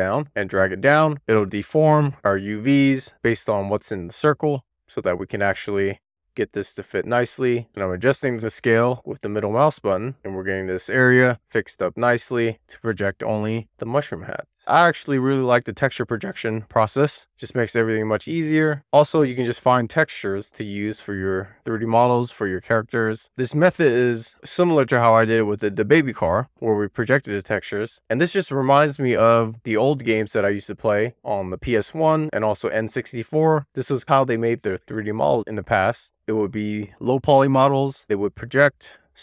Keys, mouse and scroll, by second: 0.0 click, 1.0 click, 4.5 click, 5.2 click, 7.5-7.8 scroll down 1, 7.8-9.0 scroll up 5, 11.0 click, 11.8 click, 14.3 click, 14.6 click, 15.6 click, 18.1-20.3 drag, 20.7 click, 21.3 click, 23.3 click, 24.6-25.1 scroll down 2, 25.3 shift+middle click, 26.2-26.6 scroll up 1, 27.2 click, 28.4 click, 31.0-31.6 scroll up 2, 32.4 click, 33.8 click, 34.7 click, 35.8 click, 37.8-38.6 scroll down 1, 38.6-39.1 scroll up 1.